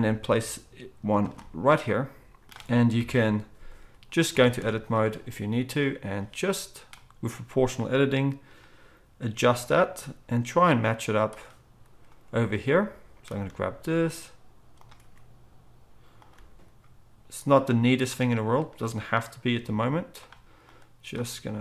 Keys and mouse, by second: 0.1 g, 0.3 middle click, 1.3 middle click, 3.0 middle click, 3.0 KP_1, 4.3 Tab, 4.6 z, 6.0-9.5 drag, 6.0-9.5 middle drag, 9.5 g, 13.5-15.0 drag, 13.5-15.0 middle drag, 13.5 g, 15.0 r, 16.3 g, 19.5 x, 21.3-21.6 drag, 21.3-21.6 middle drag, 21.3 s.